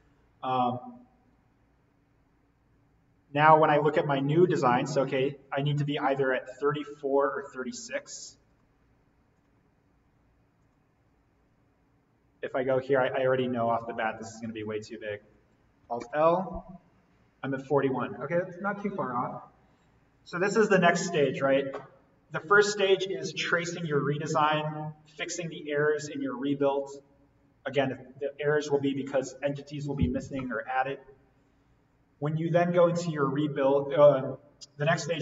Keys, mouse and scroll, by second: 8.5 click, 13.6 click, 16.5 alt+l.